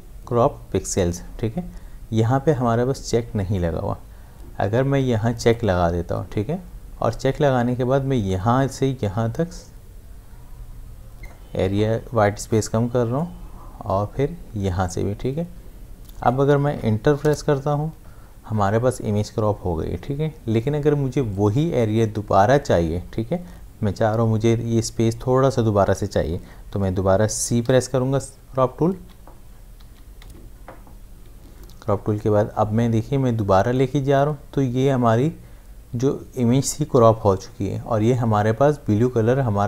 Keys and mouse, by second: 5.4 click, 8.3-18.5 drag, 27.6 c, 29.5-30.7 typing, 32.2-36.2 drag.